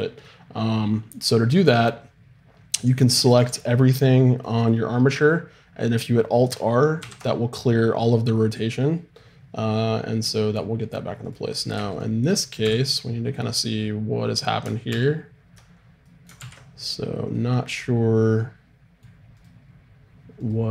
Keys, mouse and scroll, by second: 3.1 a, 3.4 a, 7.0 alt+r, 11.2-12.6 right drag, 12.6 n, 14.9 alt+g, 16.4 ctrl+z, 19.3-20.7 right drag.